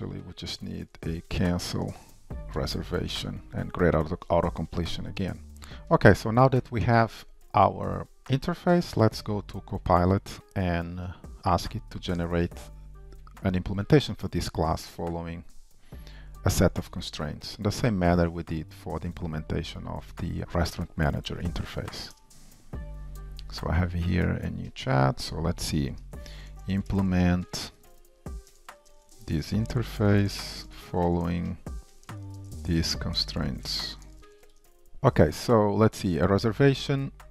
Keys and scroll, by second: 0.4 super+d, 2.6 Tab, 20.9 shift+super+a, 34.9 super+v.